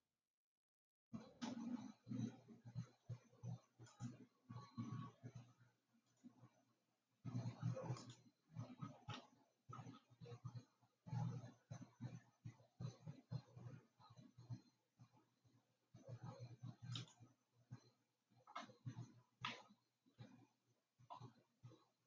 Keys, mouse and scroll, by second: 6.5 click, 8.6 click, 10.1 e, 19.8-22.0 middle drag.